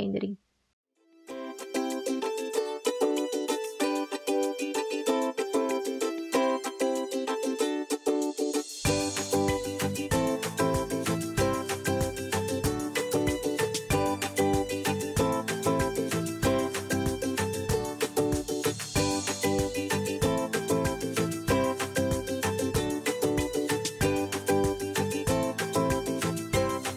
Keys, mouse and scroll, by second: 1.9 ctrl+z, 2.4 ctrl+z, 12.9 b, 14.0 Escape, 14.3 ctrl+x, 15.2 ctrl+z, 15.2 ctrl+x, 16.4 ctrl+z, 17.1 ctrl+z, 18.0 ctrl+z, 18.0 ctrl+z, 20.9 ctrl+d, 22.9 ctrl+d, 23.6 x, 25.9 ctrl+z, 25.9 x, 26.1 ctrl+z, 26.6 x, 26.6 ctrl+z.